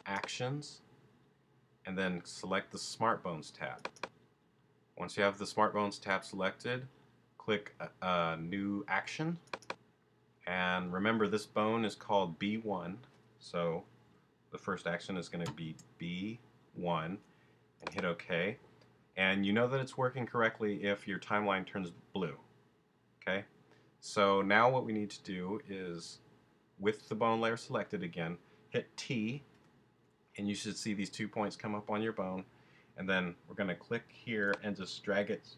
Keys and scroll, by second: 15.4 shift+b, 16.6 shift+i, 29.5 t.